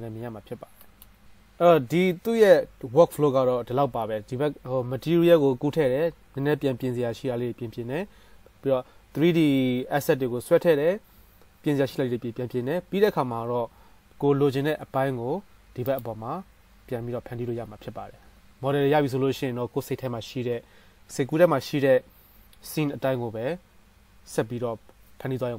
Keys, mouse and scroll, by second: 16.2-25.5 drag.